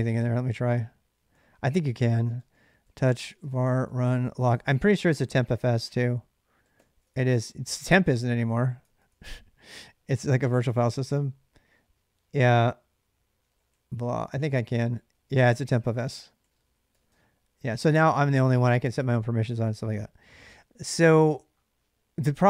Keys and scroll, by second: 1.1-5.1 typing, 6.2-7.5 typing, 8.6 Tab, 8.9 Tab, 13.0-17.2 typing.